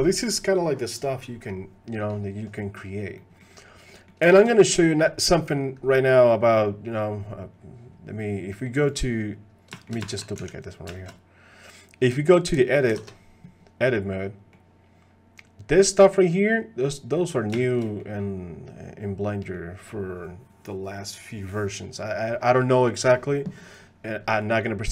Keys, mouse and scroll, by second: 2.6 middle click, 3.2 middle click, 3.9 middle click, 4.3 shift+click, 8.5 middle click, 9.7 shift+click, 10.1 shift+d, 10.9 shift+drag, 13.1 ctrl+Tab, 13.9 click, 17.6 shift+click, 17.9 click, 19.4 click, 24.3 click.